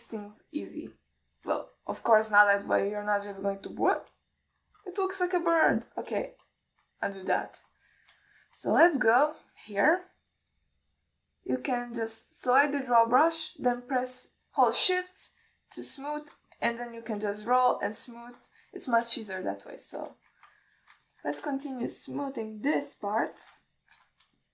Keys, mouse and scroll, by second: 0.5 alt+middle click, 1.7 alt+shift+middle drag, 3.5-4.2 middle drag, 4.6 click, 6.3 middle click, 7.4 ctrl+z, 9.0 click, 9.6 alt+shift+middle click, 10.1 ctrl+middle click, 10.7 alt+middle click, 16.7 shift+click, 17.8 click, 18.8 shift+click, 20.0 alt+middle click, 20.5 alt+shift+middle click, 21.0 ctrl+z, 21.9 alt+middle click, 22.3 ctrl+middle drag, 22.8-24.4 shift+drag.